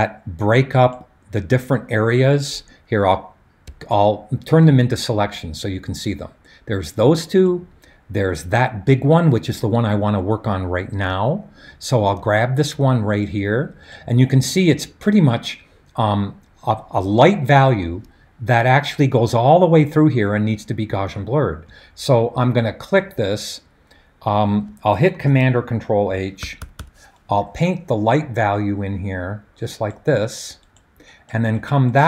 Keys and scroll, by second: 25.2 super+h, 26.4 ], 26.6 ], 27.4 ].